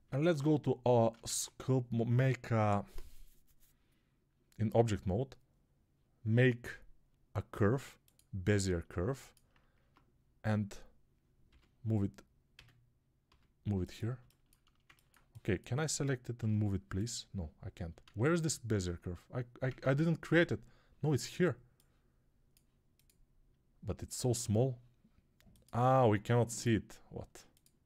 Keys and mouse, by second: 0.0 ctrl+Tab, 1.1 shift+a, 9.8 Tab, 11.3 g, 14.0-16.2 ctrl+middle drag, 16.2-17.8 right drag, 16.2 g, 17.8-22.5 alt+middle drag, 17.9 alt+z, 19.5 ctrl+Tab, 22.5-27.8 drag.